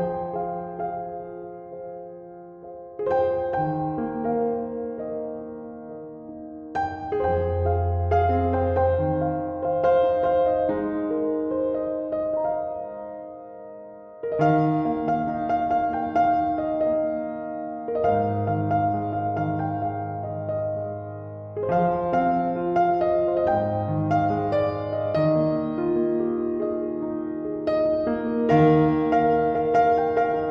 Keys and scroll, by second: 27.6 BackSpace.